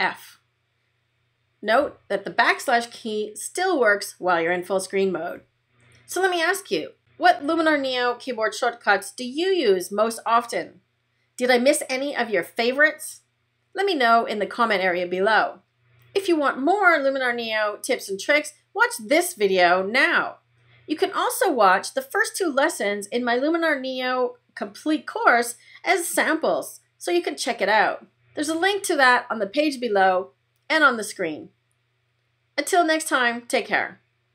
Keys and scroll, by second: 1.7 \.